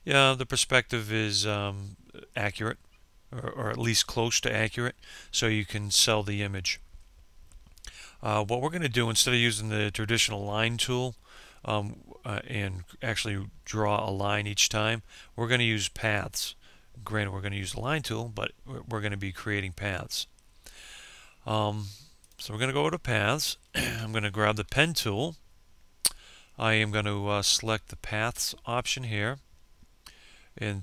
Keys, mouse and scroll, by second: 21.9 click, 24.3 p.